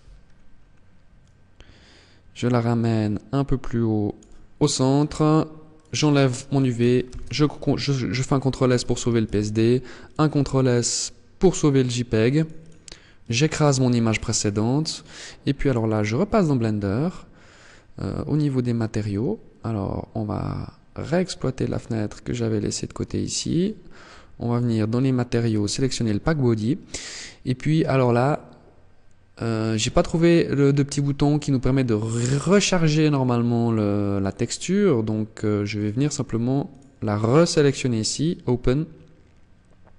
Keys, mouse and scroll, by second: 21.3 click, 23.5 click, 24.4 click, 26.3 click, 33.1 click, 36.8 click.